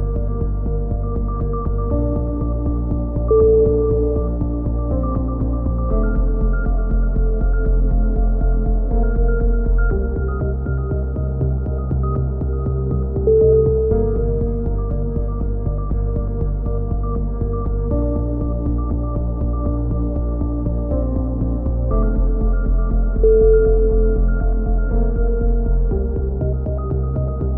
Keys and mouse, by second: 0.2 KP_3, 2.2 g, 3.3 b, 4.3 click, 4.7 e, 5.4 click, 7.8 c, 8.5 right click, 9.0 middle click, 9.7 click, 10.7 a, 10.7 c, 11.2 right click, 11.8 click, 15.6 a, 16.7 ctrl+r, 17.7 a, 18.2 c, 19.0-20.3 drag, 21.1 a, 21.2 z, 21.5 a, 22.0 a, 22.3-23.3 drag, 23.5 KP_3, 23.8 z, 24.1 click, 26.7 ctrl+r, 27.2-27.5 drag.